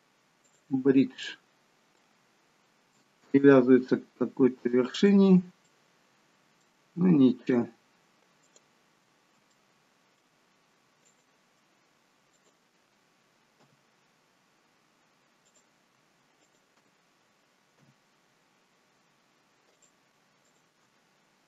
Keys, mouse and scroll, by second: 1.3 middle click, 3.3 ctrl+z, 5.0 click, 5.6 middle click, 7.4 click, 8.5 click, 9.6 middle click, 10.4-11.1 scroll up 2, 11.1 click, 12.4 shift+click, 13.7 f, 16.4 click, 17.8 f, 18.9 scroll down 2, 19.8 click, 20.5 shift+click.